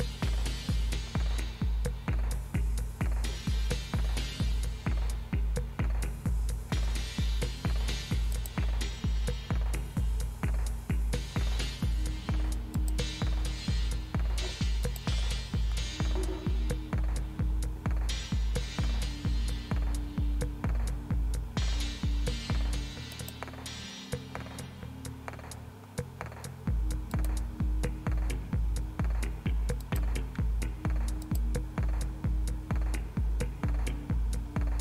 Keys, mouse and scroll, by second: 8.3 click, 12.8 click, 14.8 click, 23.1 click, 27.1 click, 29.8 click, 31.2 click.